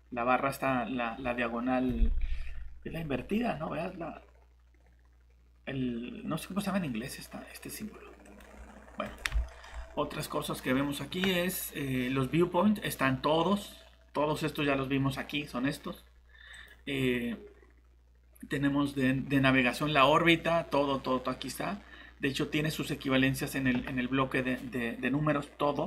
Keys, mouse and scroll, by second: 9.5 middle click, 10.4 click.